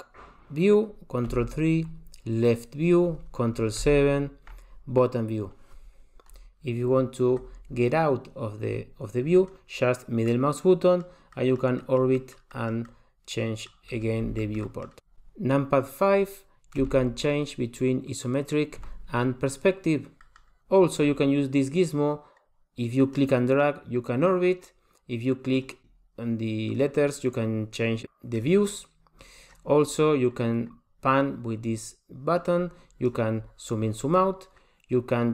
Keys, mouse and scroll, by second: 1.3 ctrl+KP_3, 3.8 ctrl+KP_7, 10.3 middle click, 11.3 middle click, 11.8 middle click, 12.2 middle click, 12.6 middle click, 12.9 middle click, 13.9 scroll up 2, 14.4 shift+middle click, 14.7 shift+middle click, 16.8 KP_5, 18.8 KP_5, 20.2 middle click, 20.2 middle click, 23.2 click, 25.6 click, 25.8 click, 26.8 click, 27.8 click, 28.4 click, 29.5 click, 30.7 click, 33.1 click.